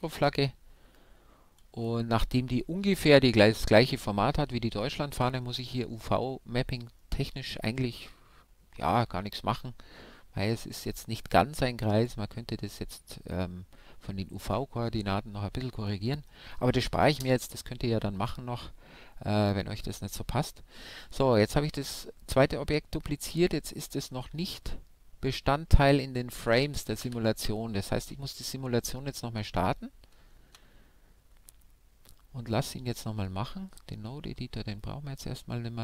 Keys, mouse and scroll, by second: 0.0 KP_Enter, 0.0-1.0 drag, 1.0-2.8 middle drag, 3.3-8.7 middle drag, 8.8-15.1 middle drag, 15.9-18.1 middle drag, 17.1 KP_0, 23.3 Right, 24.3 Left, 27.1 shift+Left, 28.1 alt+a, 35.4 click.